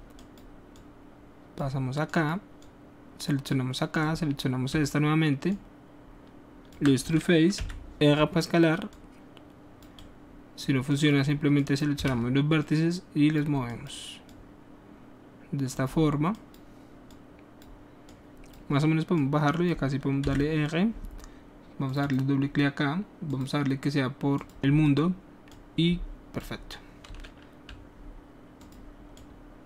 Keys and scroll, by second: 7.6 r, 12.0 w, 20.3 r.